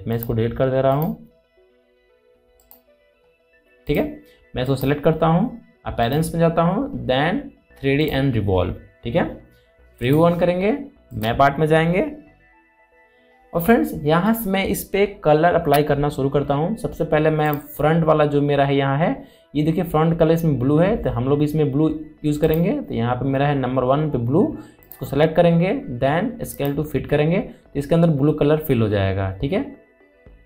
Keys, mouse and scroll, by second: 0.7 click, 0.8 click, 7.6-8.6 scroll down 1, 8.6 click, 18.1 click, 23.1 click, 25.5 click.